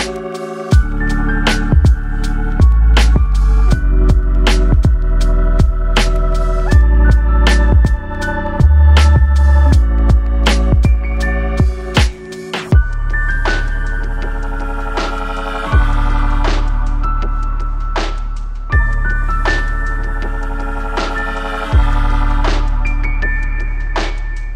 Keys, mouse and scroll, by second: 1.0-1.9 middle drag, 1.9-2.6 scroll down 4, 3.6 shift+d, 9.7-12.2 drag, 12.2-13.5 middle drag, 13.5 KP_0, 15.3-17.5 middle drag, 19.2 KP_0, 20.2-21.9 scroll up 4, 21.9 click, 22.9 click, 23.5-24.5 drag.